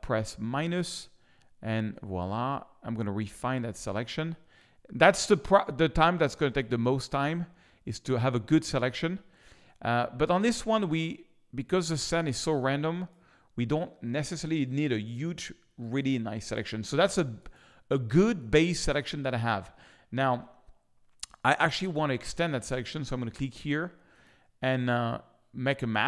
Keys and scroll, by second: 8.8 space, 13.6 space, 15.6 z.